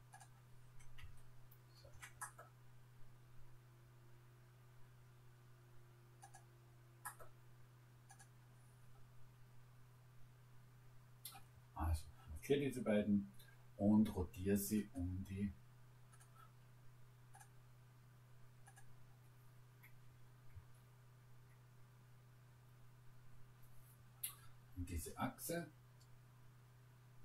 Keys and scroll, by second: 20.1 Return.